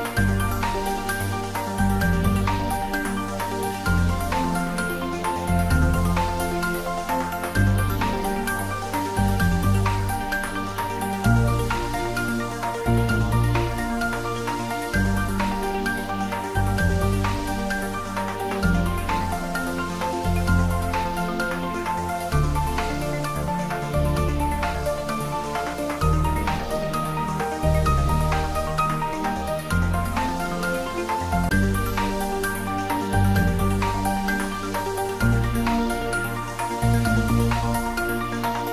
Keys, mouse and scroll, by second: 1.2 scroll down 1, 2.7-5.1 drag, 7.3 Tab, 9.0-9.6 scroll down 1, 9.8-10.2 scroll up 1, 10.6 shift+d, 13.0 x, 17.0 click, 18.8 3, 19.3 scroll down 1, 19.7 middle click, 20.4-21.9 scroll up 1, 22.6-23.3 typing, 27.7 click, 28.1-32.7 middle drag, 32.7 click, 34.0 scroll up 1, 35.5-36.5 typing.